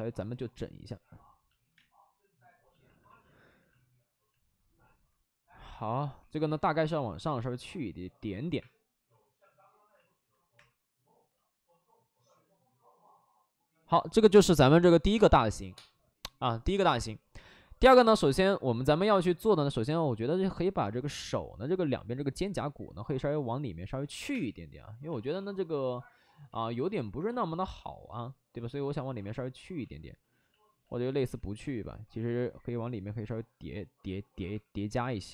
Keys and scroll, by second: 3.9 space, 5.6 space, 6.1 w, 8.5 1, 8.5 2, 10.5 3, 19.6 w, 24.0-25.2 typing, 26.4 ctrl+z, 29.7 ctrl+z, 29.9 ctrl+z, 30.1 ctrl+z, 30.4 ctrl+z, 32.0 w, 34.0 ctrl+z, 34.4 3, 34.8 3, 35.0 3.